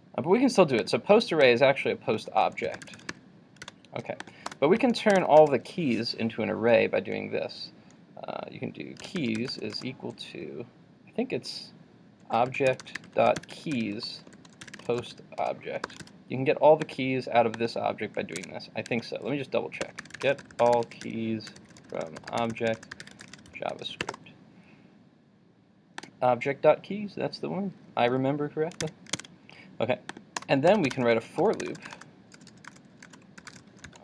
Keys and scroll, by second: 3.7 super+s, 16.0 super+s, 18.5 super+Tab, 19.9 super+t, 28.8 super+w, 29.3 super+Tab.